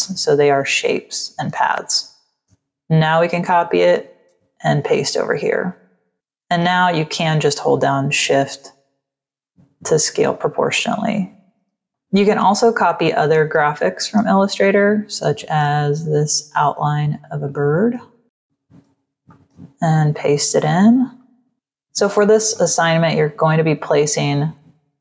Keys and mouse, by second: 2.2 ctrl+c, 2.9 click, 4.0 ctrl+v, 4.7 v, 5.1 click, 7.6 shift+click, 9.3 shift+click, 10.8 shift+click, 12.7 click, 13.5 space, 13.6 click, 15.0 z, 15.3 click, 15.9 v, 17.3 click, 18.2 click, 19.2 ctrl+v, 21.1 click, 22.4 click.